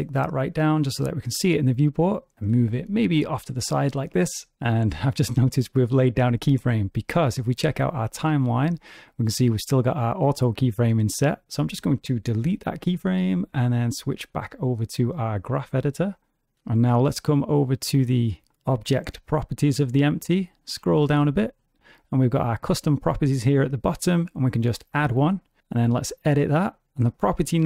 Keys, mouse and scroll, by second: 2.5 g, 7.2 click, 9.7 click, 11.1 click, 12.4 x, 14.0 click, 17.4 click, 20.2-21.6 scroll down 13, 20.9-21.6 scroll up 1, 21.6-22.2 scroll down 1, 22.2 click, 22.2-23.8 scroll down 4, 24.0 click, 24.6 scroll up 1, 24.6-25.6 scroll down 4, 25.8 click.